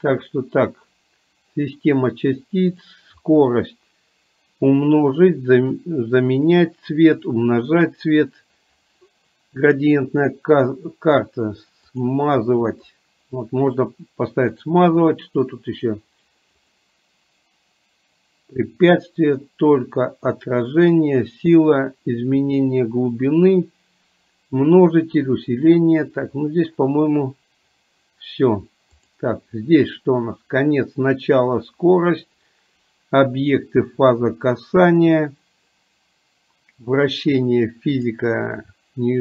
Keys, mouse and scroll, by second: 16.7-23.5 drag, 29.0 click, 38.1 click.